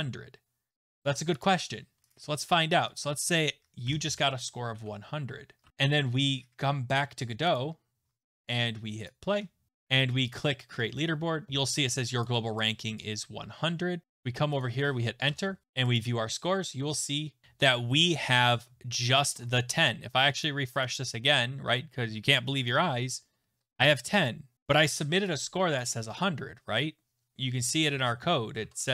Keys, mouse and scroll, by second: 1.0 click, 3.0 click, 3.9 0, 4.7 ctrl+s, 5.6 alt+Tab, 7.5 click, 9.1 click, 10.3 click, 12.2 click, 13.0 click, 14.2 click, 14.6 click, 15.3 Return, 15.9 click, 17.4 ctrl+s, 17.4 alt+Tab, 20.4 click, 20.8 click, 22.6 click, 24.5 click, 25.8 click, 27.9 alt+Tab, 28.3 alt+Tab, 28.3 click, 28.6 alt+Tab.